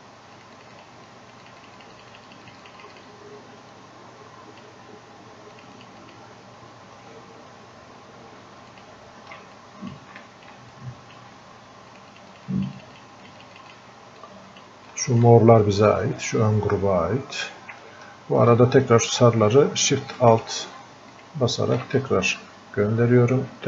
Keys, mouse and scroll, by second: 10.0 click, 11.1 click, 14.5 click, 22.0-23.6 ctrl+drag.